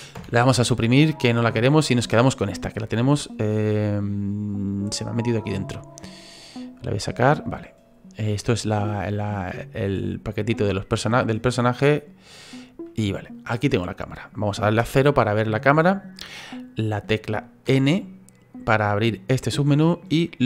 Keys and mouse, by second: 0.1 Delete, 1.8 right click, 4.7 click, 5.5 click, 10.5 click, 11.9 click, 14.7 KP_0.